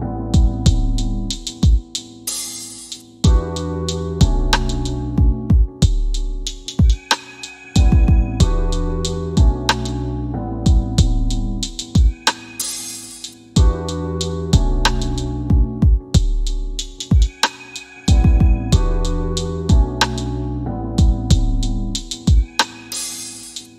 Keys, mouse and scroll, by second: 14.6 click, 16.8 scroll down 1, 19.3 c, 20.4 shift+f, 21.1 click, 23.1 click.